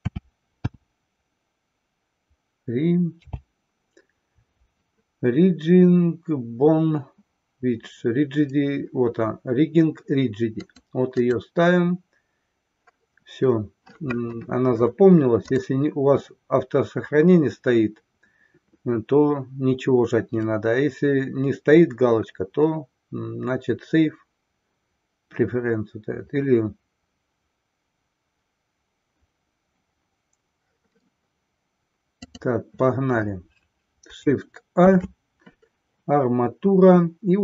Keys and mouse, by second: 34.7 shift+a.